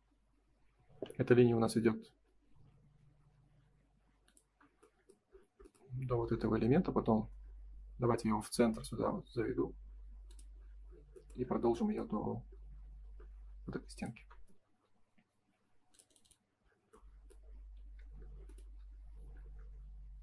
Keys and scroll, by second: 14.3 space, 17.7 ctrl+s.